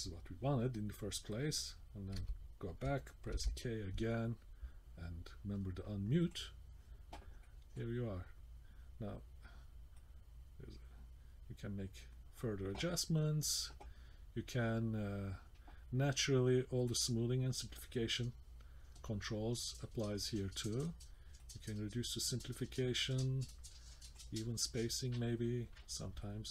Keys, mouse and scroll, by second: 2.2 d, 3.3 k, 6.3 click, 7.1 middle click, 7.1-7.4 scroll down 1, 7.4 middle click, 9.9 click, 16.8 click, 21.4 click, 24.1 click, 26.2 middle click.